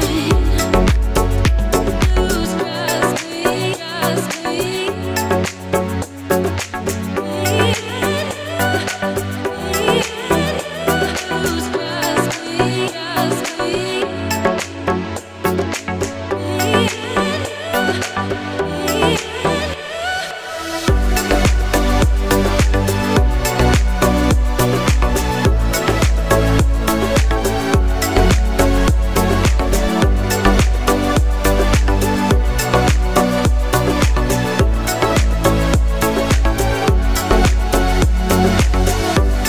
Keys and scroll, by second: 35.3 Up, 35.6-36.2 Left, 36.2 Up, 36.5-37.0 Down, 37.8 3, 37.8 6.